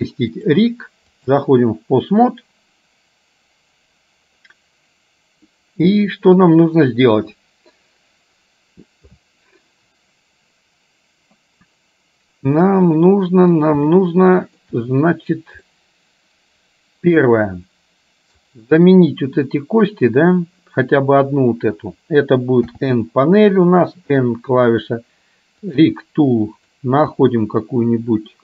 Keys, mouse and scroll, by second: 0.3-1.5 drag, 14.0 shift+middle click, 15.8-17.3 middle drag, 18.5 click, 22.8 n, 23.7 n, 25.7 click, 26.7-28.4 drag.